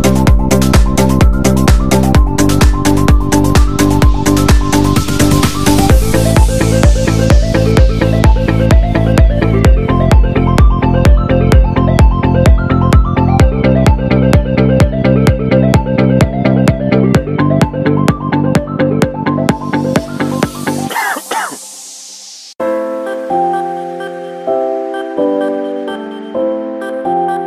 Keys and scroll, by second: 6.2 alt+super+z, 6.6 alt+super+z, 6.8 alt+super+z, 7.3 alt+super+z.